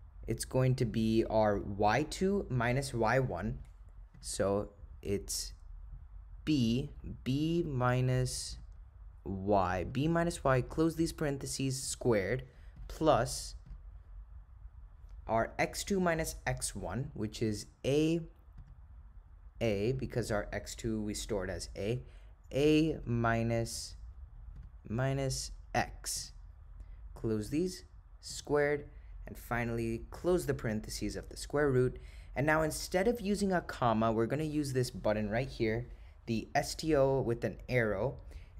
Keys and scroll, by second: 7.6 -, 9.9 1, 10.8 ), 13.7 (, 23.1 -, 27.2 ), 30.2 ).